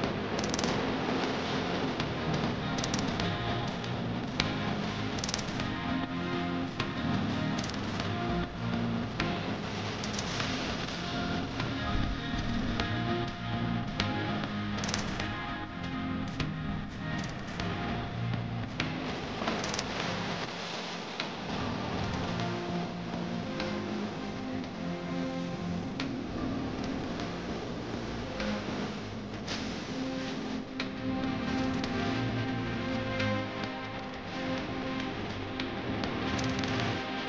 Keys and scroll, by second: 2.0 F3, 7.9 F3, 10.7 F3, 16.2 Escape, 26.3 1, 26.6 5, 26.8 Return, 30.0 ctrl+r, 33.4 c, 34.4 shift+F2.